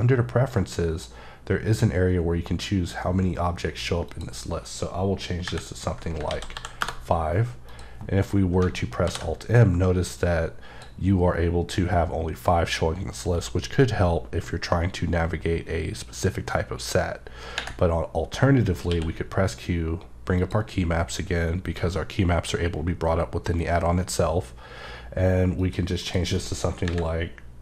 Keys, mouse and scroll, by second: 0.5 click, 4.1 click, 5.4 KP_3, 6.2 ctrl+a, 6.5 KP_5, 7.6 click, 9.1 alt+m, 10.2 click, 20.4 click, 21.1 click, 26.0 click, 26.8 KP_3.